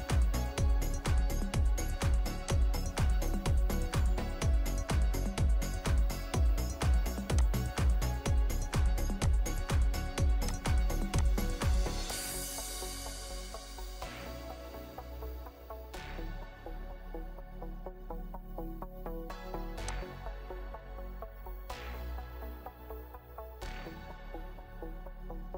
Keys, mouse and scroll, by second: 6.1 right click, 6.4 scroll down 1, 15.9 scroll up 1, 16.0-16.7 scroll down 1, 18.5 right click.